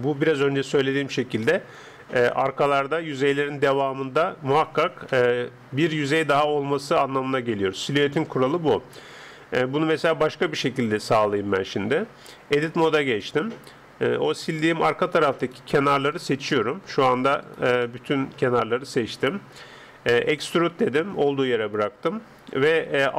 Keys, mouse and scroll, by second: 1.4-3.1 middle drag, 3.7-8.3 middle drag, 5.1 KP_0, 9.6-12.7 middle drag, 12.7 Tab, 15.5 right click, 15.7-19.7 drag, 16.5-19.7 middle drag, 20.4 e.